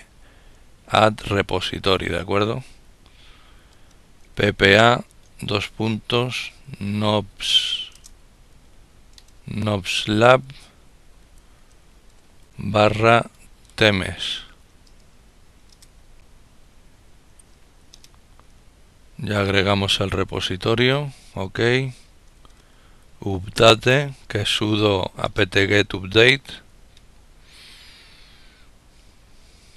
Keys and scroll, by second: 0.0-1.1 typing, 7.8-11.2 typing, 13.1 typing, 15.1 Return, 15.1 typing, 21.8-22.6 typing.